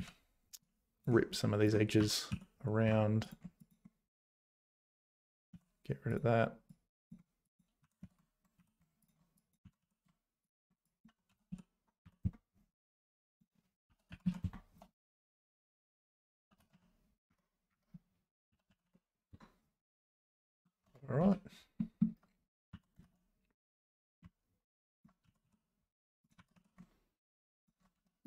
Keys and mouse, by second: 0.0 z, 0.6 click, 1.4 click, 2.0 g, 4.6 click, 5.2 click, 5.5 x, 6.8 click, 7.8 g, 9.3 click, 9.6 g, 10.9 click, 11.3 s, 13.2 click, 13.8 s, 15.5 click, 16.4 s, 17.5 s, 18.5 s, 20.4 click, 20.9 Tab, 21.2 z, 21.8 middle click, 22.7 g, 25.2 g, 26.4 g, 27.9 `.